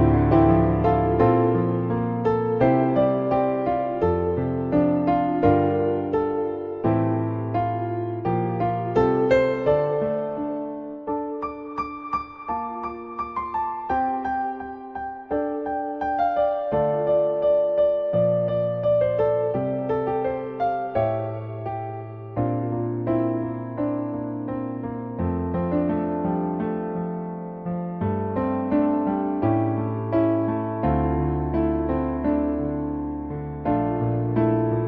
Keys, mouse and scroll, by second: 2.7 middle click, 4.1-5.4 drag, 7.7-10.0 drag, 10.3-11.1 middle drag, 11.3 middle click, 12.7-13.0 middle drag, 15.2-16.9 drag, 17.4-18.3 middle drag, 19.3-20.0 middle drag, 28.0-30.0 drag, 30.6 middle click, 31.5 middle click.